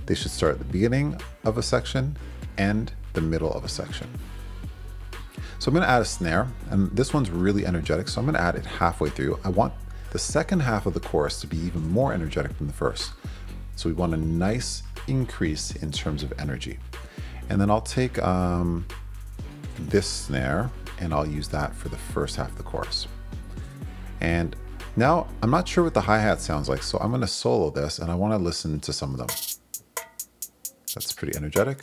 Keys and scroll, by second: 7.3 super+c, 8.3 super+v, 20.6 super+c, 22.2 super+v, 29.2 space.